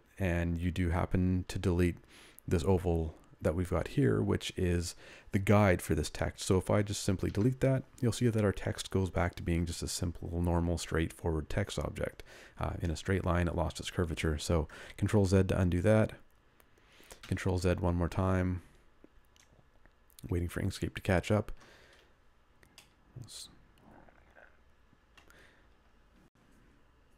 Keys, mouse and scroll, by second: 7.2 Delete, 15.2 ctrl+z, 17.4 ctrl+z, 24.2 middle click.